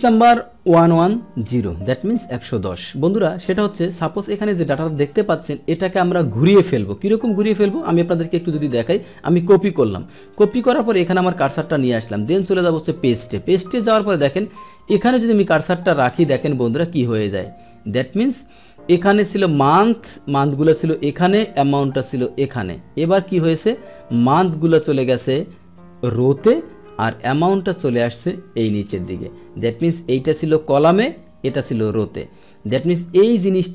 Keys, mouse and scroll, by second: 4.0-5.8 drag, 9.4 ctrl+c, 11.3 click, 12.7 click, 16.1 click, 17.2 scroll down 1, 17.9-19.8 scroll up 1, 19.8-21.1 drag, 21.9 click, 23.0-23.6 scroll down 1, 23.6-24.3 scroll down 1, 24.3-26.4 drag, 27.3-29.5 drag, 29.5-30.5 middle drag, 30.5 click, 31.5 click, 32.4-33.3 scroll down 1, 33.3 click.